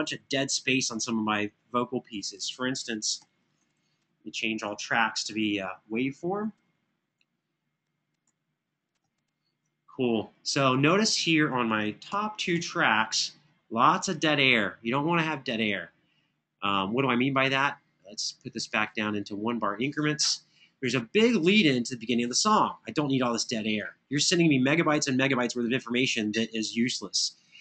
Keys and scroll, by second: 2.9 super+Left, 7.6 super+Right, 10.8 super+Left, 11.9 ctrl+alt+Up.